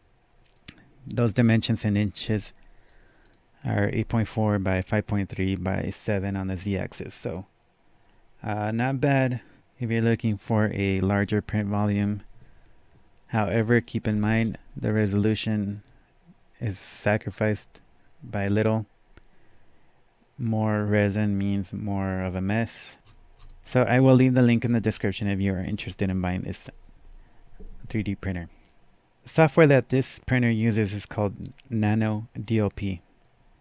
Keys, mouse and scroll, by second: 0.6 click, 0.6-1.9 scroll down 1, 2.1-7.3 drag, 12.0-14.1 drag, 14.1 KP_Enter, 14.3 KP_Enter, 23.0 KP_Enter, 23.0 click, 23.4-24.2 scroll up 4, 24.7 scroll up 1.